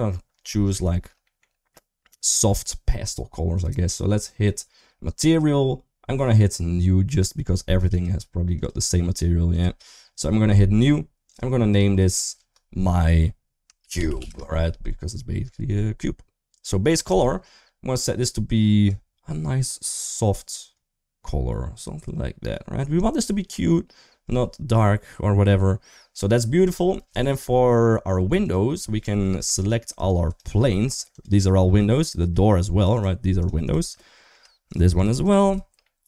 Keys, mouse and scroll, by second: 0.4 shift+middle click, 0.7 middle click, 1.0 shift+middle click, 3.3 click, 7.7 click, 8.3 click, 9.4 click, 11.8 click, 12.0-14.1 drag, 16.9 click, 27.0 Tab, 28.0 3, 28.2 click, 29.4 shift+click, 29.8 shift+click, 30.1 shift+click, 30.4 middle click, 30.9 shift+click, 31.2 shift+middle click, 31.8 shift+click, 32.8 shift+click, 33.4 shift+click, 33.7 middle click, 34.8 shift+click, 35.0 shift+click, 35.3 shift+click, 35.6 middle click.